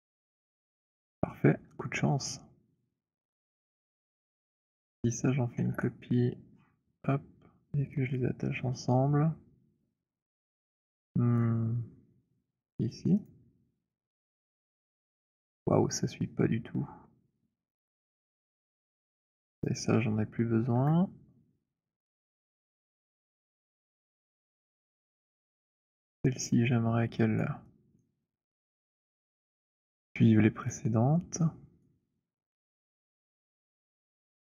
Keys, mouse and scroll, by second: 0.2 h, 3.0 click, 4.0 click, 5.4 ctrl+d, 6.3-8.4 scroll, 9.4 scroll, 10.5-10.9 scroll, 11.2 shift+right click, 13.2 click, 15.3-15.8 scroll, 18.7 click, 19.6 ctrl+click, 20.7 Delete, 23.0 click, 24.0 alt+middle click, 25.0 click, 26.0 scroll, 27.4 alt+click, 28.1 alt+click, 28.1 alt+right click, 28.8 alt+middle click, 29.5 alt+right click, 31.6 right click, 33.1 click.